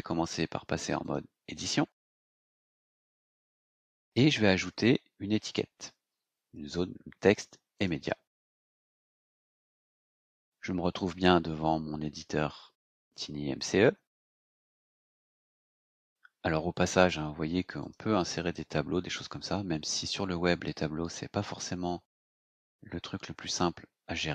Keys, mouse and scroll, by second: 1.0 click, 2.9-3.7 scroll down 4, 4.5 click, 7.7 click, 15.1 click, 17.7 click.